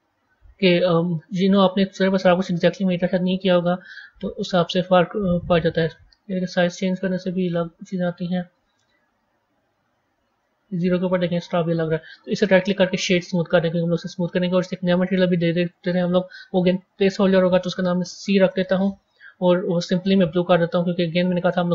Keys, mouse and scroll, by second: 1.6-8.9 drag, 11.2-12.1 middle drag, 12.1 click, 12.7-14.5 right drag, 14.5 click, 15.5-16.8 drag, 16.8-20.1 drag.